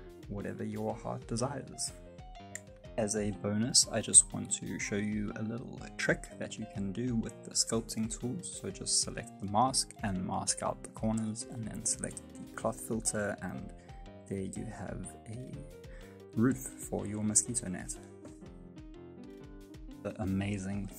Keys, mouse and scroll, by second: 0.0-2.8 typing, 1.0 right click, 1.3 middle click, 2.1 middle click, 2.5 middle click, 2.7 middle click, 2.9 middle click, 3.0 scroll down 2, 3.1 shift+middle click, 3.2 middle click, 3.6 right click, 3.7 shift+right click, 3.8 shift+right click, 3.9 g, 4.1 shift+middle click, 4.2 s, 4.4 g, 4.5 scroll up 3, 4.6 middle click, 4.8 F9, 4.8 middle click, 5.1 middle click, 5.6 click, 6.7 shift+middle click, 6.8 middle click, 7.2 g, 7.5 middle click, 7.7 g, 8.3 shift+middle click, 8.4 scroll up 3, 8.5 shift+middle click, 9.2 click, 9.8 shift+middle click, 10.1 click, 10.5 f, 10.8 click, 11.5 click, 12.1 click, 12.7 click, 13.6 click, 14.0 click, 14.7 middle click, 15.6 ctrl+z, 15.7 click, 16.4 middle click, 16.9 click, 17.7 shift+middle click, 17.9 scroll down 1, 18.0 middle click, 18.2 ctrl+z, 18.4 middle click, 18.8 shift+middle click, 19.0 Tab, 19.1 middle click, 19.4 s, 20.1 g, 20.1 Tab, 20.2 middle click, 20.7 middle click.